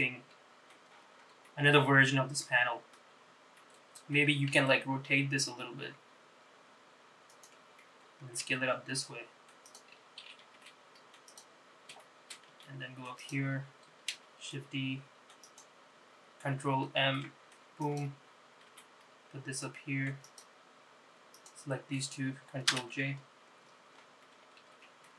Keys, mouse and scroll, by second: 1.0-1.6 scroll up 4, 1.6-3.1 middle drag, 3.2 scroll down 2, 3.7 middle click, 4.6 alt+scroll down 1, 4.7 r, 8.5 s, 10.7 g, 11.8 scroll down 2, 12.1 shift+middle click, 12.6 g, 14.3 shift+d, 17.0 ctrl+m, 18.8 g, 21.4 shift+click, 23.0 ctrl+j, 24.8 s.